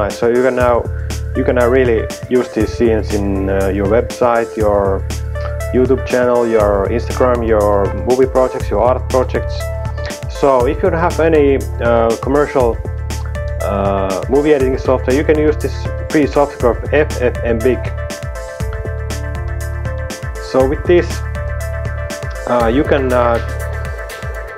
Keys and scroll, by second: 15.8-16.9 typing, 18.1 typing.